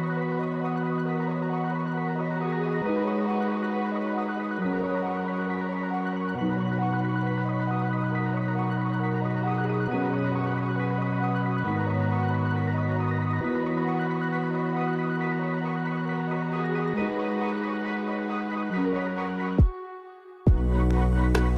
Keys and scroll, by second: 1.0 ctrl+z, 8.4 space, 9.5 space.